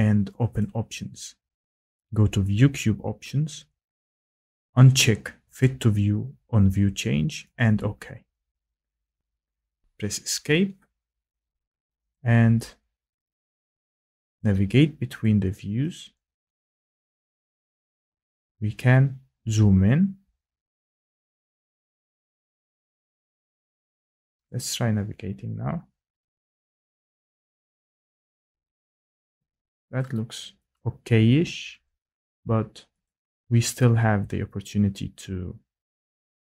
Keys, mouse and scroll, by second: 0.6 click, 9.0 click, 10.3 Escape, 12.1 click, 13.4 click, 14.4 click, 15.2 click, 15.9 click, 17.0 click, 18.6 scroll, 20.6-21.3 scroll, 21.9 scroll, 24.4 click, 25.5 scroll, 27.6 click, 28.4 click, 29.1 click, 30.0 click, 30.8 click, 33.0 click.